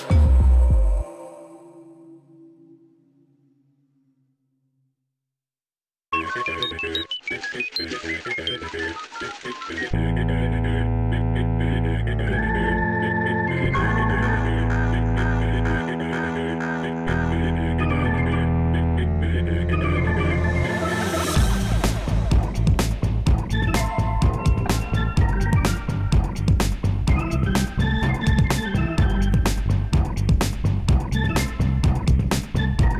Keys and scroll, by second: 0.2 Tab, 7.2 shift+z, 26.0 ctrl+alt+0.